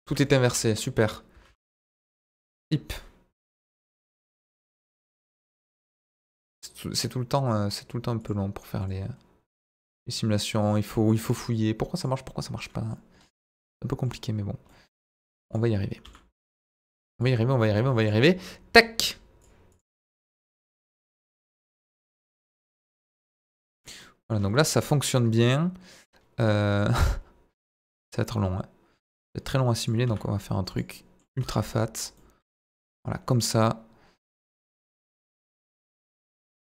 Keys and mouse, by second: 0.0 Tab, 0.2 middle click, 0.4 a, 1.4 alt+n, 2.6 Tab, 3.5 KP_Divide, 4.2 z, 5.0 click, 5.5 click, 8.2 click, 8.8-10.7 drag, 12.0 click, 12.6-13.0 middle drag, 13.2 middle click, 14.7-15.1 middle drag, 15.4 click, 16.0 s, 16.1 middle click, 16.9 Escape, 19.7-21.3 drag, 21.4 middle click, 22.3-23.9 drag, 24.0-24.3 middle drag, 25.0-26.4 middle drag, 28.2 click, 30.0 s, 30.7 click, 30.9 middle click, 31.4 s, 31.4 middle click, 31.9 click, 32.1-32.5 middle drag, 32.6 ctrl+a, 34.9 click.